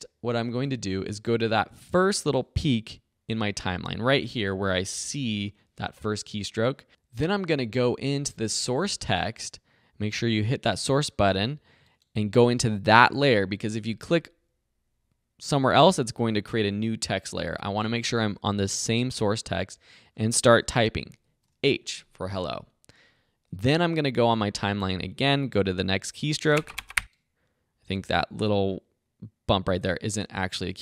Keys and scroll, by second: 5.0 =, 21.2 shift+h, 26.4 space.